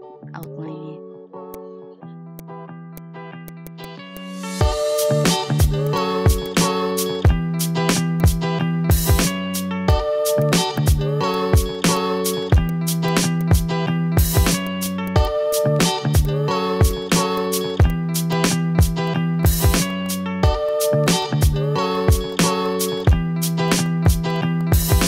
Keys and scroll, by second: 2.0 ctrl+z, 10.1 ctrl+z, 10.6 ctrl+z, 12.5 ctrl+z, 13.6 ctrl+z, 13.9 a, 17.2 ctrl+z, 19.6 ctrl+z, 20.4 ctrl+z, 22.1 ctrl+z, 22.5 ctrl+z, 23.5 ctrl+z, 23.8 ctrl+z, 24.2 a.